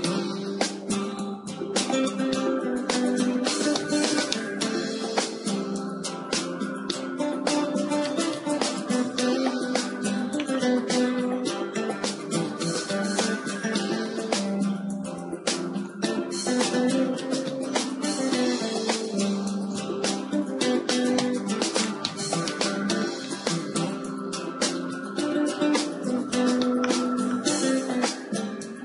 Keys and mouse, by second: 2.2 Tab, 3.8 Tab, 5.5-7.6 drag, 6.2 Tab, 7.6 a, 8.0 a, 9.6 shift+d, 12.0-14.0 drag, 12.8 r, 13.4 r, 17.0 r, 21.9-24.4 drag, 24.4 a, 24.5 a, 26.0 KP_3, 26.2-28.8 middle drag, 28.5 r.